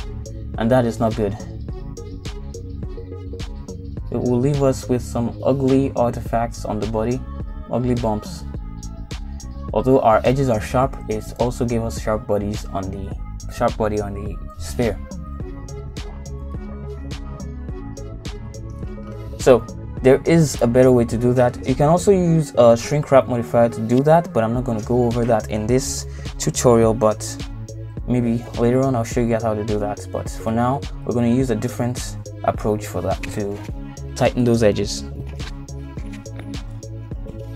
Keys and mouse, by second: 1.1 ctrl+z, 1.9 ctrl+r, 7.5 middle click, 8.6 ctrl+r, 10.3 Tab, 10.6 middle click, 11.9 middle click, 12.9 middle click, 13.9 middle click, 15.2 middle click, 15.7 middle click, 16.9 middle click, 17.9 middle click, 18.9 middle click, 19.9 Tab, 21.4 Tab, 26.1-27.3 middle drag, 28.0 middle click, 29.3 Tab, 30.6 ctrl+z, 32.5 ctrl+z, 34.5 middle click, 35.4 middle click, 36.2 shift+middle click, 36.7 middle click.